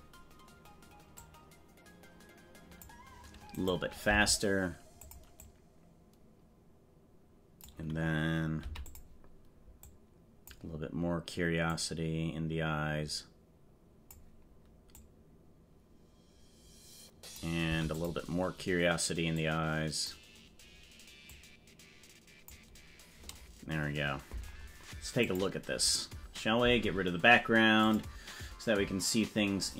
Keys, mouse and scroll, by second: 1.3-3.0 drag, 3.5 right click, 4.1 g, 5.6-7.9 drag, 8.6 i, 10.0 click, 11.7-14.3 drag, 15.1-17.5 drag, 17.7 i, 19.5 click, 21.3-22.6 drag, 25.3 click, 27.8 click, 29.6 scroll up 2.